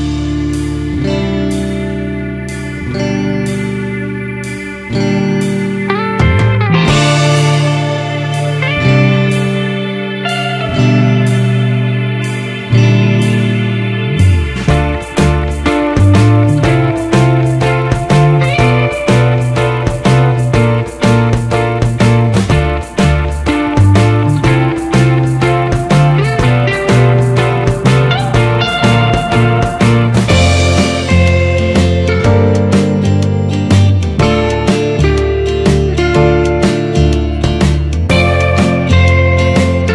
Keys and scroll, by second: 24.2 ctrl+-, 33.1 ctrl+0.